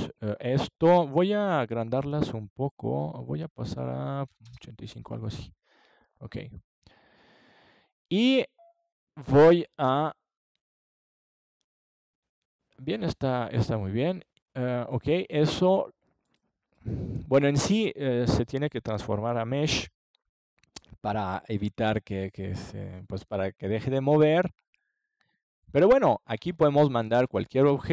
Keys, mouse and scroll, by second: 3.8-5.4 drag, 5.4-7.3 middle drag, 12.0-13.8 drag, 17.9-20.8 drag, 21.2 click, 24.0 KP_Decimal, 25.5-27.9 middle drag.